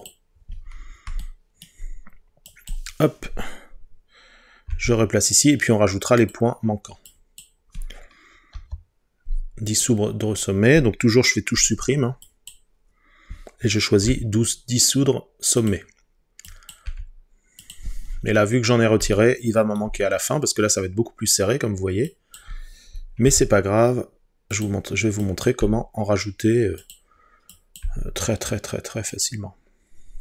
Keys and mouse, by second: 4.7 g, 6.2-7.2 drag, 8.6 Delete, 12.3 click, 14.1 g, 15.6-16.9 drag, 16.9 g, 19.2 shift+middle click, 22.1 click, 23.3 g, 24.6 click, 25.6 g, 26.8 click, 27.9 g, 29.1 click.